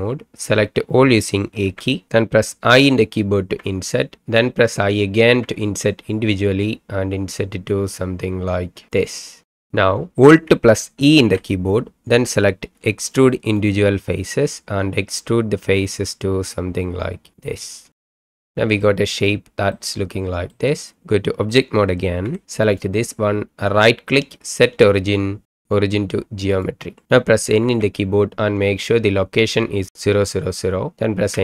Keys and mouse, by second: 1.7 a, 3.6 i, 5.4 i, 11.2 alt+e, 17.3 click, 18.1 middle click, 19.7 middle click, 22.2 Tab, 22.6 click, 23.7-26.7 drag, 27.6 n, 31.2 n.